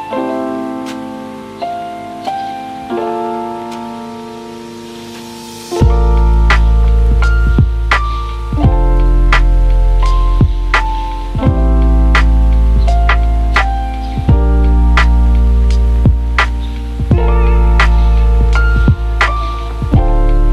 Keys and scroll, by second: 0.9 z, 12.2 j.